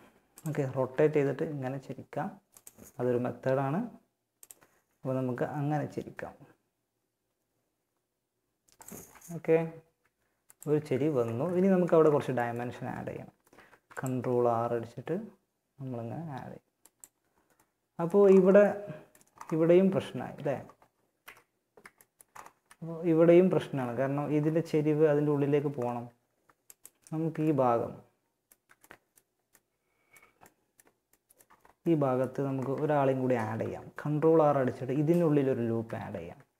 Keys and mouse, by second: 2.2 r, 4.0 r, 8.2-9.2 middle drag, 9.2 r, 10.0 a, 12.8 ctrl+r, 18.2-20.4 middle drag, 20.4 KP_1, 21.8 z, 22.6 z, 26.8 middle click, 27.5-31.3 middle drag, 32.0 a, 35.3 ctrl+r.